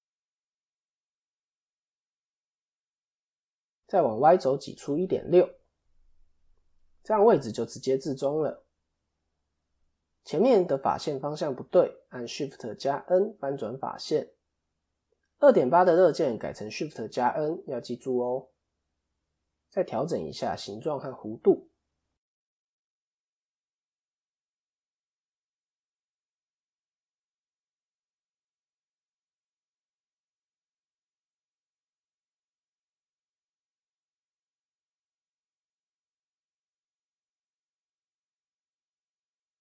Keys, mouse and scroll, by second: 5.8 click, 9.0 click, 9.9 a, 11.6 middle click, 13.6 shift+n, 16.9 click, 18.0 KP_7, 20.5 shift+middle click, 21.1 click, 22.6 o, 23.0 click, 35.3 click, 36.4 o, 36.7 click.